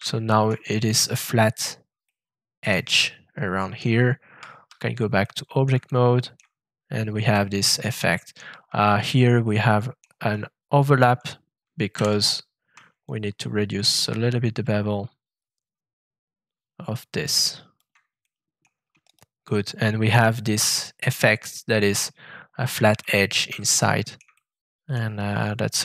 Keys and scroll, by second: 4.3 shift+Tab, 11.9 shift+f.